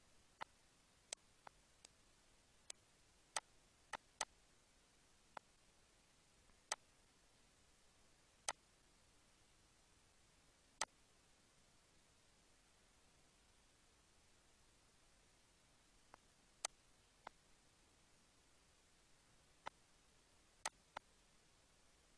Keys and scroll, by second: 15.4 ctrl+d.